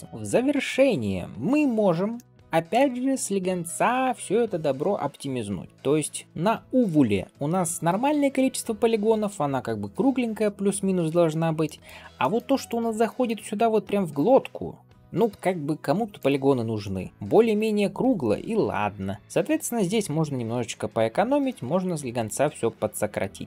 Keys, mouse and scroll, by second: 0.0 d, 0.0 Tab, 0.0 shift+middle click, 1.3 2, 1.6-2.0 scroll up 1, 2.0 middle click, 5.7 middle click, 7.7-9.1 middle drag, 10.6 scroll down 1, 11.5 middle click, 12.0 shift+middle click, 12.5 click, 12.9 middle click, 14.0 shift+click, 15.1 m, 16.7 middle click, 17.4 click, 18.1 middle click, 19.1 shift+click, 20.0 m, 21.3-23.1 middle drag.